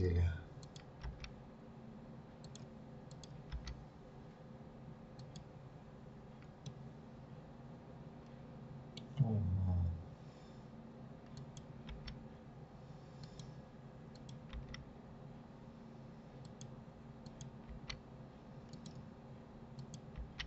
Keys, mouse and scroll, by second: 0.6 click, 1.0 g, 3.0 click, 3.5 g, 6.7-9.7 middle drag, 11.3 click, 11.9 g, 14.2 click, 14.5 g, 17.3 click, 17.7 g, 19.7 click, 20.2 g.